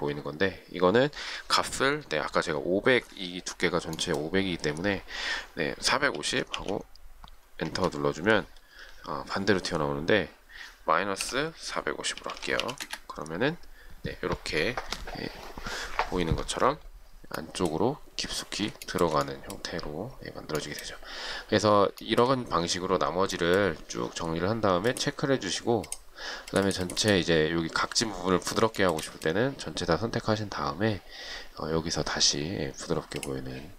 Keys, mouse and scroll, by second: 6.2-7.2 typing, 7.9 Return, 11.2-12.8 typing, 13.0 Return, 19.1 shift+middle click, 22.3 shift+middle click, 29.0 shift+middle click.